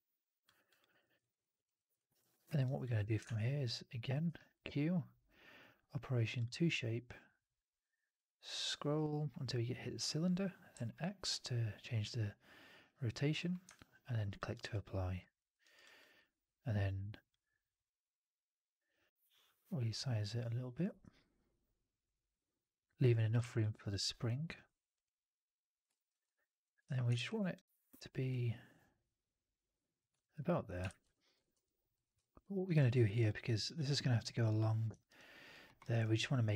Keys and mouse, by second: 0.5 alt+drag, 0.7 alt+drag, 0.9 alt+middle drag, 1.1 alt+right click, 1.3 alt+drag, 1.6 alt+middle drag, 1.8 alt+right drag, 2.1 alt+drag, 2.3 alt+middle drag, 2.5 alt+right click, 2.7 alt+drag, 3.1 shift+Tab, 4.1 q, 13.6-14.3 alt+drag, 14.4 alt+right drag, 14.6-15.1 alt+drag, 15.3 alt+drag, 15.5 alt+right drag, 15.7 alt+drag, 21.2-23.2 drag, 23.3 w, 23.5 alt+click, 25.8 alt+middle click, 26.0 alt+right click, 26.1 alt+click, 26.7 1, 27.0 shift+x, 29.7 click, 30.1 alt+middle click, 30.2 alt+right click, 30.4 alt+click, 30.8 shift+x, 31.0 alt+click, 31.4 4, 31.8 click, 32.3 alt+right drag, 32.5 alt+right drag, 32.8 alt+middle drag, 32.9 alt+right drag, 33.1-33.6 alt+drag, 34.9 alt+right click, 35.0 alt+click, 35.5 alt+middle click, 35.7 alt+right click, 35.9 alt+click.